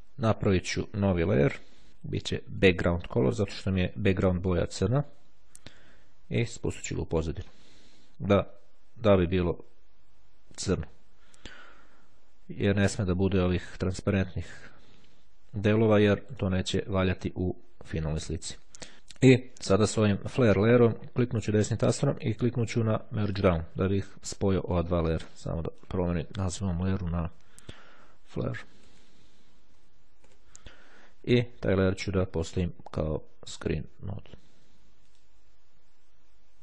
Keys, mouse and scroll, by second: 0.7 click, 2.7 click, 4.9 click, 6.8 click, 9.6-10.6 ctrl+scroll up 3, 11.2-12.3 ctrl+scroll down 3, 17.9-20.1 drag, 20.6 right click, 23.3 click, 24.7 click, 25.6 click, 26.2-27.4 typing, 29.9 shift+e, 30.1 shift+Return, 32.1 click, 33.3 click, 35.0 click.